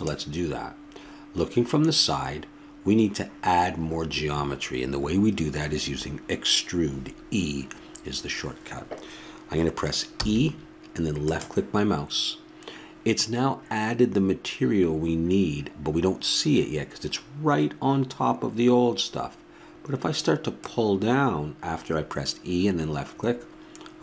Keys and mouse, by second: 20.6-22.3 drag.